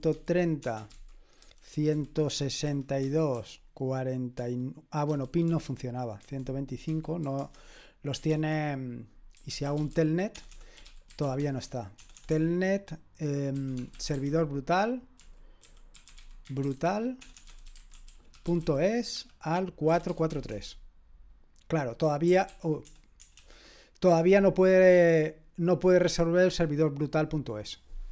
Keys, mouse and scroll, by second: 0.0-7.2 typing, 7.4 Return, 8.3 ctrl+c, 9.2-20.8 typing, 22.6 ctrl+p, 22.9 BackSpace, 23.2 BackSpace, 23.4 BackSpace.